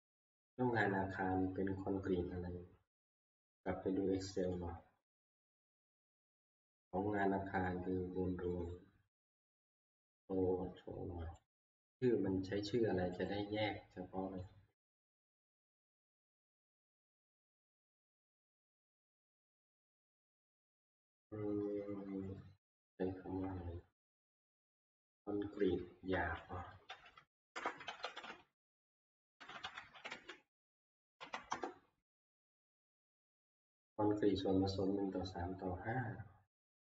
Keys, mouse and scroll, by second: 0.3 Escape, 4.6 click, 8.6 click, 9.6 click, 11.5 click, 13.3 click, 14.6 click, 24.4 click, 25.9 ctrl+f, 26.9-32.0 typing, 35.3 Return.